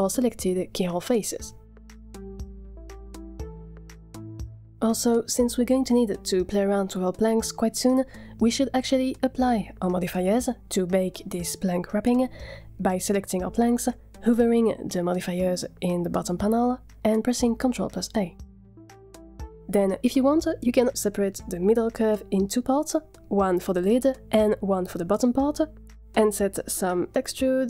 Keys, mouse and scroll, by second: 0.0 click, 1.6 a, 1.7 a, 1.9 Tab, 3.1 a, 3.1 scroll down 4, 3.4 click, 3.6 middle click, 5.2-5.5 scroll down 2, 5.3 middle click, 5.5 z, 7.1 click, 8.5 click, 15.5 ctrl+a, 16.5 ctrl+a, 19.7 click, 19.7 z, 21.2 click, 21.9 Tab, 22.1 p, 24.8 Tab, 25.2 click, 26.0-26.4 drag, 26.8 z, 27.3 click, 27.5-27.6 scroll down 6.